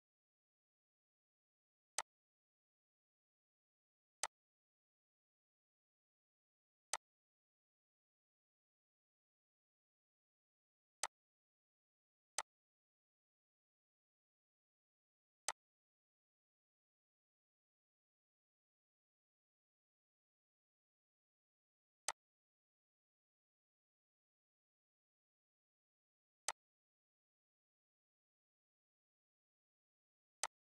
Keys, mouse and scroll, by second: 4.2-8.6 drag, 8.6-9.2 scroll, 21.7 click, 22.0-26.4 shift+drag, 26.4-30.4 drag.